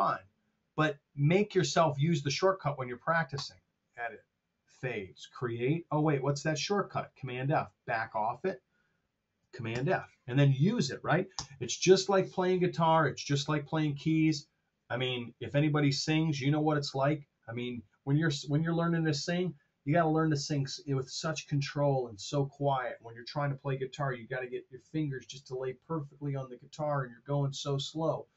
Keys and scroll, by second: 9.6 super+f, 11.3 Return.